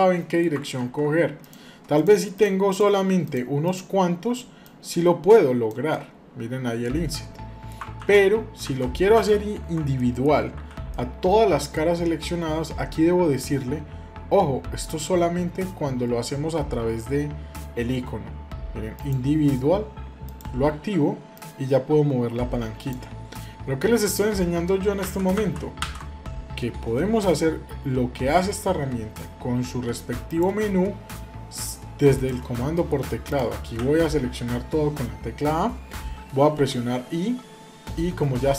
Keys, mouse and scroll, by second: 0.6 ctrl+z, 1.2-4.0 drag, 4.4-5.7 drag, 5.7-7.5 middle drag, 7.8 ctrl+z, 8.5 ctrl+z, 9.7 middle click, 10.3 a, 10.7 middle click, 20.0 click, 25.1 ctrl+z, 31.3 click, 32.5 middle click, 33.0 click, 33.4 a.